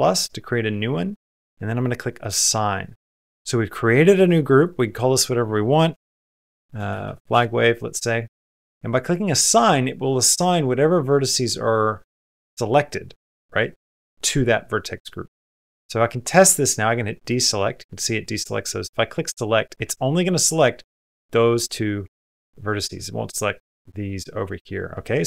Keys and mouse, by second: 1.9-2.7 typing, 2.1 click, 4.5-7.1 drag, 18.9-19.7 typing, 19.0 click.